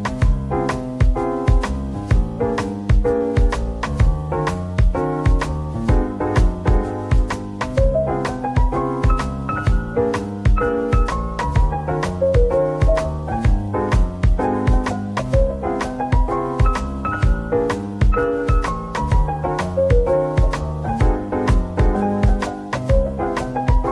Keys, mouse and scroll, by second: 0.0-0.1 typing, 1.2 scroll up 1, 2.2 middle click, 3.7 scroll down 1, 3.7 /, 4.3 middle click, 5.5 double click, 8.7 double click, 17.3 ctrl+z, 20.1 scroll down 1, 20.7 double click, 22.0 typing, 22.7-23.0 scroll down 1, 23.7 middle click.